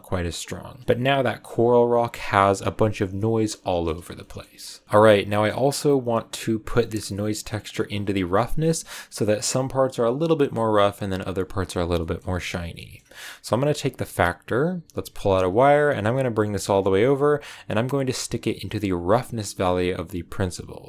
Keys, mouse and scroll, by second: 0.8-2.1 shift+middle drag, 2.1 scroll down 2, 3.6-4.0 scroll down 1, 4.2-7.1 shift+middle drag, 7.1 click, 7.4-12.2 middle drag, 12.2-12.7 scroll up 2, 12.7-14.3 middle drag, 14.3 click, 20.8 middle click.